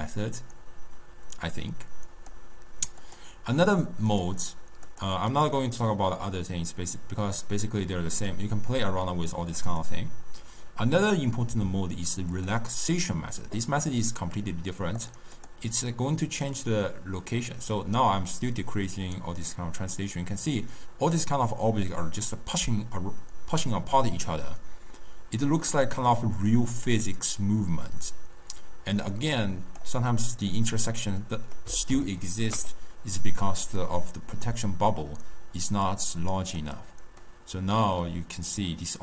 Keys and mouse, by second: 3.1-3.9 drag, 4.2-5.1 drag, 5.5-8.4 drag, 9.8-13.1 drag, 15.1 click, 15.5 click, 16.6-19.7 drag, 30.6-33.9 middle drag, 33.9-36.9 drag, 37.4-39.0 drag.